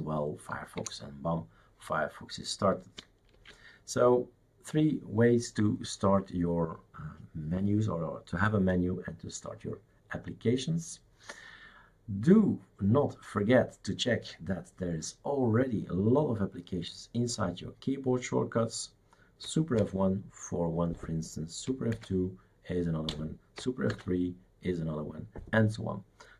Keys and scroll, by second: 0.8 Return, 3.3 shift+super+q, 19.8 super+F1, 21.9 super+F2, 23.9 super+F3.